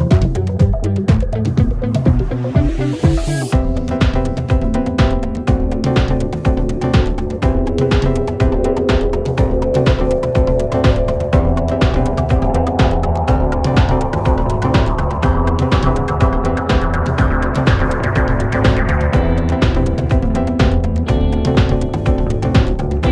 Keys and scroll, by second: 4.6 ctrl+z, 5.4 ], 6.2 ], 12.0 shift+f, 20.7 Delete, 21.7 ], 22.9 4.